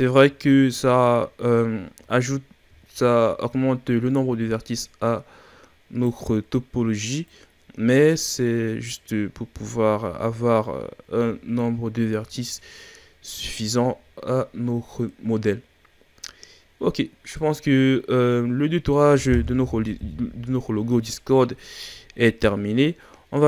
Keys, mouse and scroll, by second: 0.3-2.0 shift+scroll down 2, 2.8-4.1 shift+scroll up 9, 4.1 right click, 7.2 right click, 9.3-9.7 scroll down 1, 9.7-11.1 ctrl+scroll up 5, 11.1 a, 11.5-12.3 scroll down 2, 12.3-14.2 shift+scroll down 5, 16.9-17.3 scroll down 1, 17.3-20.0 middle drag, 20.0 KP_1, 20.9-21.5 scroll up 3, 21.6-21.9 ctrl+scroll up 5, 21.9-22.3 shift+scroll down 6, 22.3-23.4 scroll up 3.